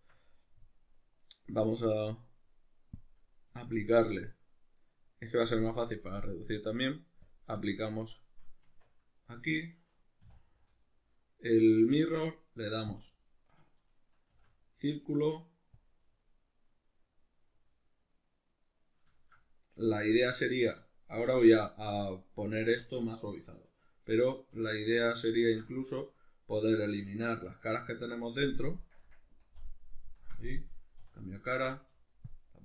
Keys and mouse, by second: 3.0 click, 3.7-7.3 shift+middle drag, 7.3-15.8 drag, 8.7 Tab, 10.3 w, 16.0-32.6 middle drag, 24.5 3, 25.4 ctrl+z, 29.0 ctrl+KP_Add, 29.5 ctrl+KP_Subtract, 31.0 3, 31.7 x.